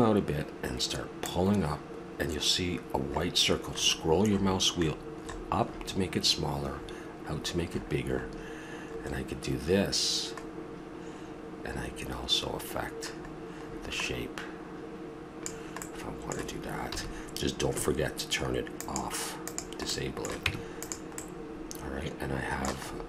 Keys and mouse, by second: 1.2-3.0 drag, 15.8-17.8 middle drag, 16.9 a, 18.8-19.2 drag, 19.9 click, 19.9 middle click, 20.4 Tab, 21.3 middle click, 21.5-22.0 middle drag.